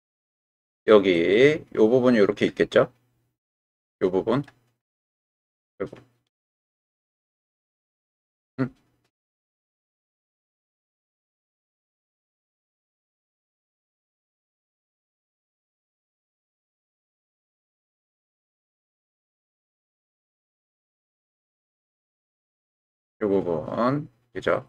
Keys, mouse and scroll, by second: 0.2 click, 1.2 click, 5.7-8.1 drag, 9.3-11.3 drag, 12.5-16.4 middle drag, 18.5 middle click, 19.8 click, 21.9 ctrl+z, 22.8-24.6 drag.